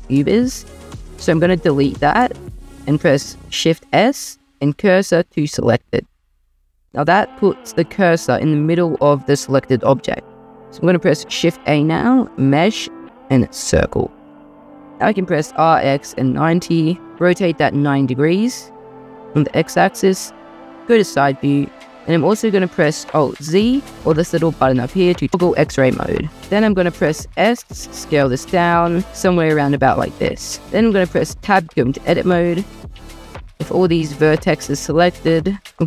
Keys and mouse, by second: 1.1-1.7 typing, 2.2 click, 3.5 shift+s, 11.1 shift+a, 15.3 r, 15.7 x, 16.1 9, 16.2 0, 16.7 Return, 20.9 middle drag, 23.6 alt+z, 24.3 click, 27.3 s, 30.2-31.4 middle drag, 31.4 Tab, 35.6 ctrl+z.